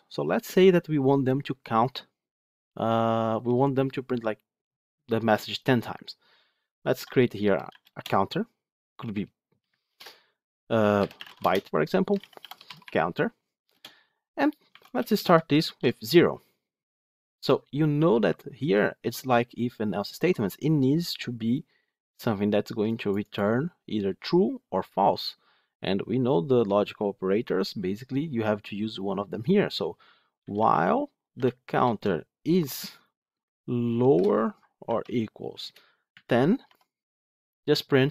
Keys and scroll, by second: 9.8 ctrl+BackSpace, 31.8 Return.